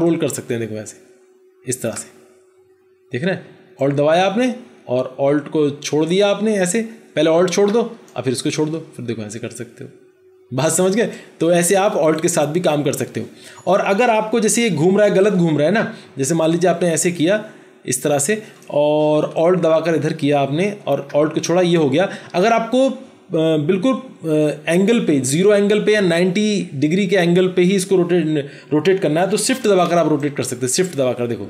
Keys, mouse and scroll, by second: 3.6 alt+click, 19.3 alt+click, 30.0 shift+click.